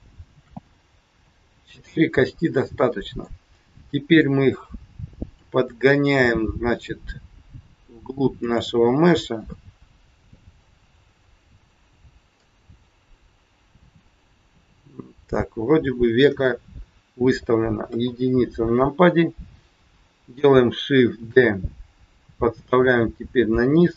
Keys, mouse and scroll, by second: 0.3 shift+d, 1.8 middle click, 4.1 click, 5.9 click, 8.2 click, 9.4 click, 12.4 click, 13.8 middle click, 17.8 KP_1, 21.1 shift+d, 23.6 middle click.